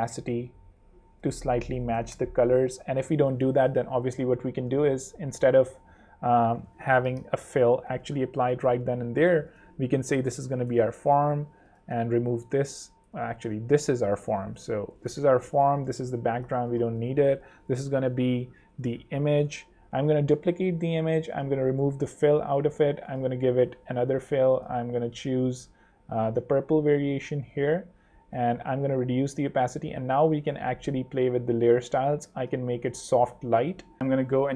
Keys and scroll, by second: 0.0-0.2 typing, 0.4 super+Return, 0.6 super+3, 1.1 super+2, 1.6 super+3, 1.8 0, 2.0 Home, 3.2 ↺, 6.8 alt+super+l, 7.4 alt+l, 10.0 super+r, 10.2-11.1 typing, 12.0 super+x, 12.7 super+z, 14.4 super+r, 14.5-15.5 typing, 15.9 super+Return, 16.0 super+x, 17.5 shift+super+r, 18.5-19.7 typing, 27.4 Escape, 28.3 5.